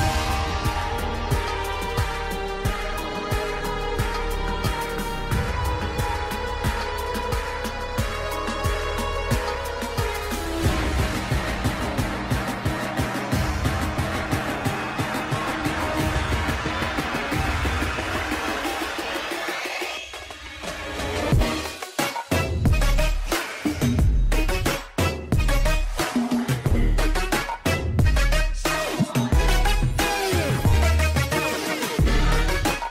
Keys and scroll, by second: 7.0 shift+F2, 9.4 alt+b, 13.4 Escape.